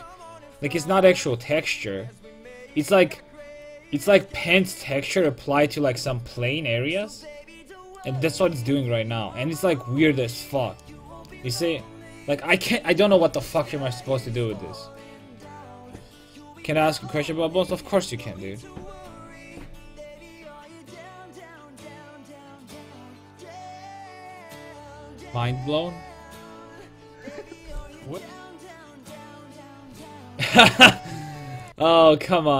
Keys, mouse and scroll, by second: 3.8-4.8 middle drag, 8.0-12.2 drag.